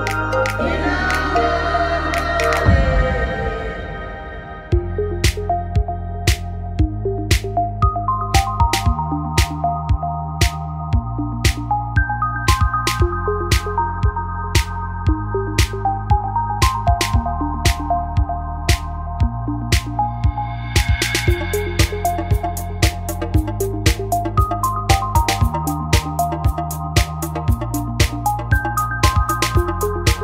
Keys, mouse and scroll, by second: 2.4-3.9 drag, 4.0 ctrl+r, 8.6-11.7 drag, 11.7 ctrl+r, 15.2 click, 16.0-17.9 right drag, 17.9 s, 19.6-23.7 drag, 23.7 n, 24.1 n, 24.7-26.1 drag, 24.9 n, 26.2 s, 28.3-29.6 drag, 29.6 middle click.